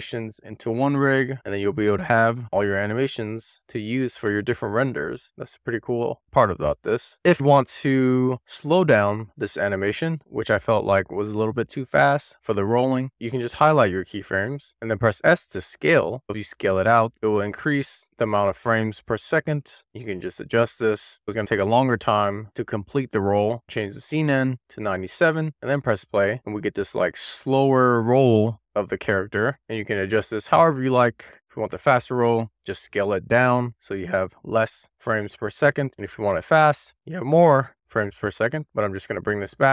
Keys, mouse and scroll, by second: 1.3 click, 2.5 drag, 2.9 click, 3.7-4.5 drag, 5.9 a, 13.0 scroll up 6, 13.2 click, 16.0 click, 16.2-16.6 scroll down 4, 17.1 super+z, 17.6 click, 18.4 s, 20.5 click, 20.8 scroll down 1, 21.0-21.4 scroll up 1, 21.4-21.8 scroll down 1, 22.3 g, 23.4-25.5 drag, 26.0 scroll down 1, 26.4 click, 27.2-28.3 middle drag, 29.0-29.4 scroll up 1, 29.4-30.1 scroll down 2, 30.1 scroll up 1, 30.3-36.6 middle drag, 37.6 click, 38.3 scroll up 1, 38.5 click, 38.7 click.